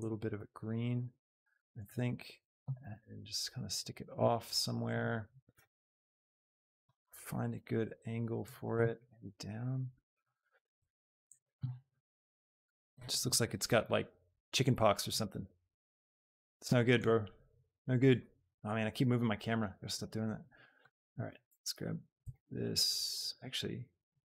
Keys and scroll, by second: 2.0 g, 3.1 g, 5.3 g, 5.7 x, 9.0 g, 21.4 x, 22.2 Escape.